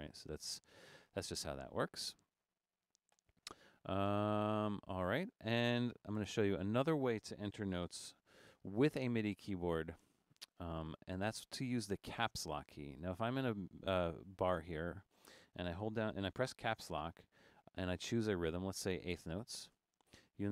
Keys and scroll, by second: 0.5 Escape, 6.3 BackSpace, 7.5 super+a, 7.9 super+4, 16.8 Caps_Lock, 19.8 4.